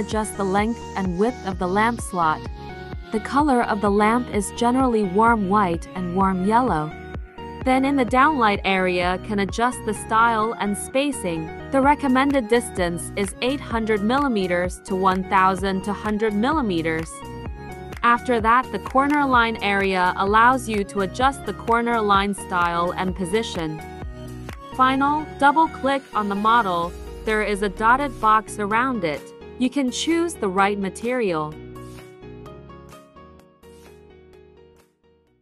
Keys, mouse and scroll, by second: 0.2 click, 1.9 click, 3.1 click, 4.1 click, 4.7 click, 5.8 click, 8.7 click, 9.6-10.6 typing, 14.0 click, 17.3 click, 17.7 click, 22.0 click, 23.4 click, 26.4 click, 26.4 click, 27.9 click.